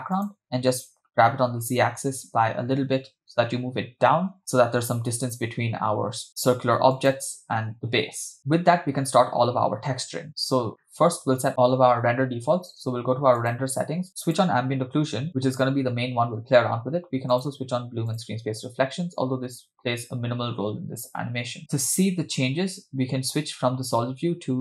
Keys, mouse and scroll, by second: 1.0 g, 10.9-11.5 shift+middle drag, 13.4 click, 14.4 click, 17.3 click, 18.1 click.